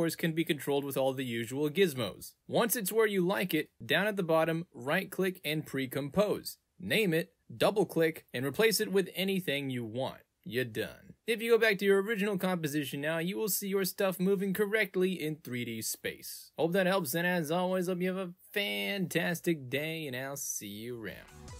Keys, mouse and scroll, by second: 0.1 ctrl+z, 0.2 click, 0.4 ctrl+z, 0.4 click, 2.2 click, 4.2 right click, 5.9 click, 6.6 w, 6.7 l, 6.8 m, 6.8 g, 7.0 click, 8.0 click, 8.6 click, 8.8-9.6 typing, 8.9 Return, 9.3 click, 9.6 click, 12.7 click, 13.5 click, 13.6 space.